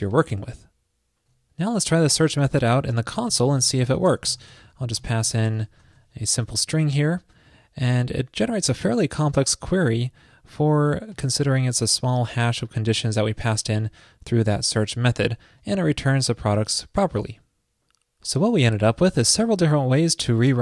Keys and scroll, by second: 0.6 super+s.